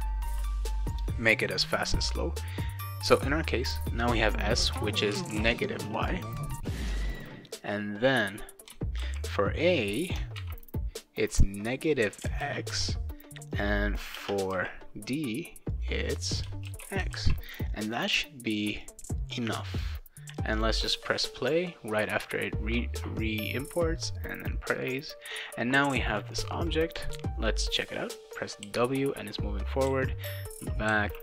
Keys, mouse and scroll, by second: 3.0 click, 5.1 shift+n, 7.0-8.5 drag, 9.0 ctrl+c, 10.1 click, 10.4 ctrl+v, 11.9 click, 12.4 shift+x, 13.5 click, 14.2 space, 14.5 ctrl+v, 15.7 click, 16.6 shift+x, 17.2 ctrl+s, 18.8-19.8 drag, 20.6 click, 26.1 click, 28.6 w, 29.9-31.2 typing.